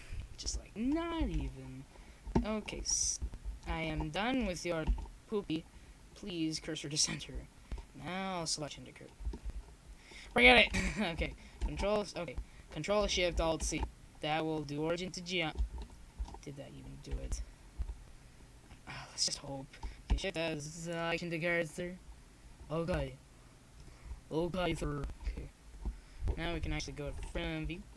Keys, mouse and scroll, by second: 0.3 shift+s, 2.9-4.1 middle drag, 4.1 click, 5.3 click, 5.4 ctrl+z, 6.0 ctrl+z, 6.0 click, 6.6 click, 7.8 ctrl+j, 11.4 shift+s, 14.1 ctrl+z, 15.2 shift+s, 17.5 KP_7, 18.4 shift+s, 19.5 z, 21.0 z, 21.6 ctrl+z, 22.6 shift+s, 26.0 shift+s.